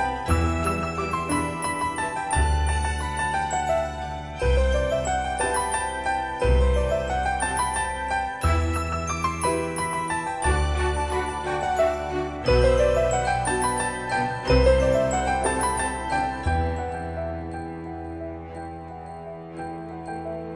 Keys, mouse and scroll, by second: 0.0-1.6 typing, 3.5 click, 4.4 Return, 5.2-5.6 scroll down 1, 6.0 middle click, 6.7-7.4 scroll up 1, 7.4-8.1 scroll down 1, 12.6 shift+middle click, 15.2 click, 18.2-18.9 scroll up 1, 18.9 middle click, 19.7-20.5 scroll up 1.